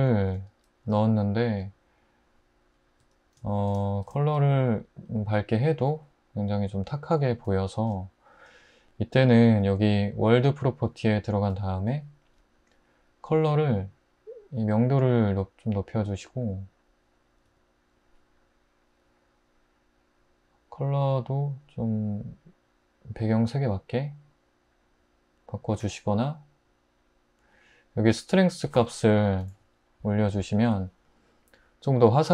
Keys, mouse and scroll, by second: 0.9 typing, 3.0 click, 17.4 click, 29.2 3, 29.4 Return.